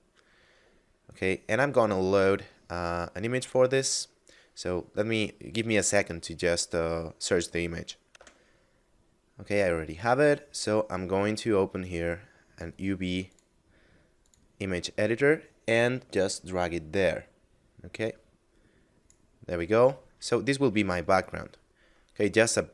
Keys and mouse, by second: 8.1 F9, 11.5 click, 16.1 click, 19.5 middle click.